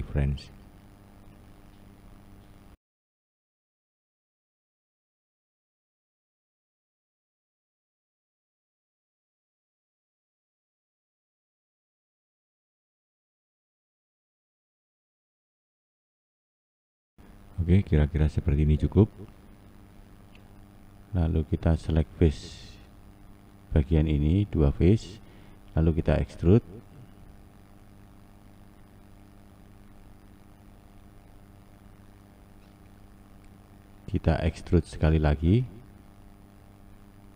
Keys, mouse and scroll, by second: 2.1-5.6 scroll down 4, 5.6 click, 6.5 click, 8.5-10.4 scroll up 1, 10.4 click, 11.7 click, 13.9 click, 14.6 click, 15.3 click, 17.6 click, 18.1 click, 21.3-22.9 scroll down 2, 22.9-23.5 scroll down 1, 23.5 2, 24.3 click, 26.5 e.